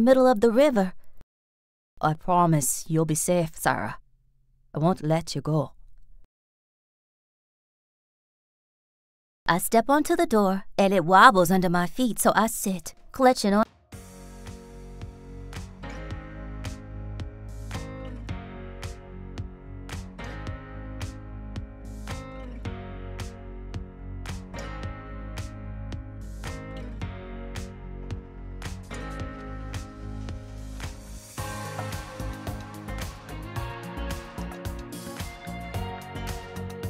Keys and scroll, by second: 4.2 b, 6.1 space, 7.3 b, 8.5 a, 8.9 space, 9.8 t, 11.1 b, 13.5 space, 14.1 b, 17.9 b, 19.1 BackSpace, 19.8 r, 20.9 ctrl+s, 21.4 r, 26.9 t, 28.1 ctrl+s, 29.1 s.